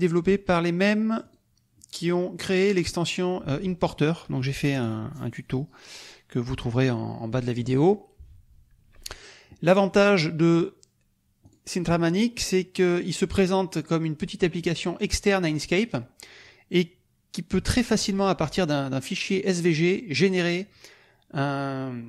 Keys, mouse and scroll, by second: 1.2 click, 2.4 click, 11.4 click, 12.8-18.7 drag.